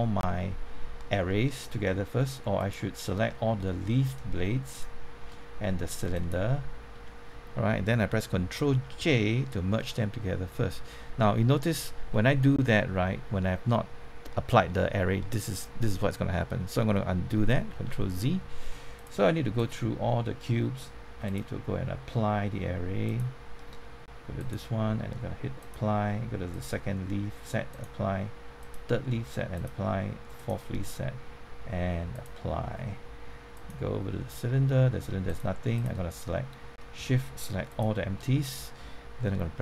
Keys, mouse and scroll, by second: 2.5 click, 4.6 shift+click, 6.1 ctrl+click, 10.5-13.5 middle drag, 17.7 ctrl+z, 18.9-34.5 drag, 36.2 scroll down 1, 37.7 shift+click.